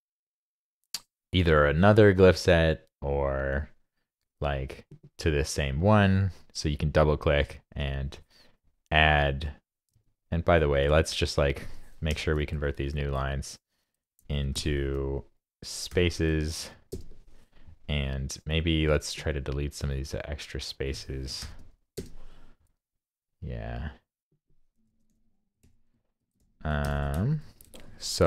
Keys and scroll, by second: 9.9 super+Tab, 11.1 super+Tab, 12.1 super+n, 15.9 shift+super+l, 21.4 shift+super+l, 24.9 alt+Left, 25.1 alt+Left, 26.4 alt+Left, 27.4 super+a, 27.7 super+c, 27.9 super+Tab.